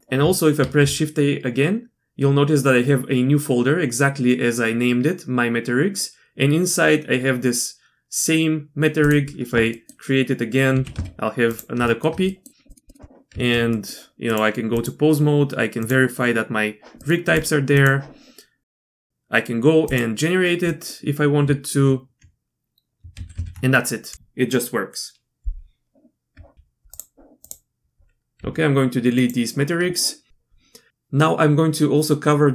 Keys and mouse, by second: 0.0 shift+a, 0.6 shift+a, 9.7 click, 10.8 g, 11.9 shift+click, 12.0 shift+middle click, 12.3 click, 12.7 click, 12.9 middle click, 13.3 Tab, 13.7 middle click, 14.3 click, 15.8 click, 17.0 middle click, 17.4-19.1 drag, 20.7 drag, 23.2 ctrl+z, 23.3 ctrl+z, 26.3 Tab, 26.5 x, 27.4 click, 28.4 x.